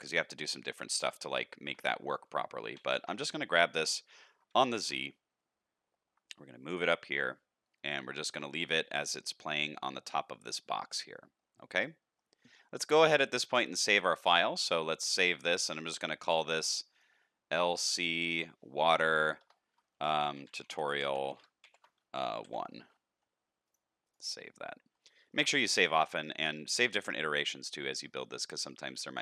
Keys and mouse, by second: 1.5 shift+middle click, 2.6 g, 4.5 g, 6.9-8.0 middle drag, 8.2 alt+a, 8.8-9.4 middle drag, 10.0-12.1 middle drag, 13.0-14.1 drag, 25.1 shift+middle click, 25.5-26.3 middle drag, 26.5 shift+middle drag, 27.2-28.1 middle drag, 28.3 shift+middle drag, 28.7 middle click.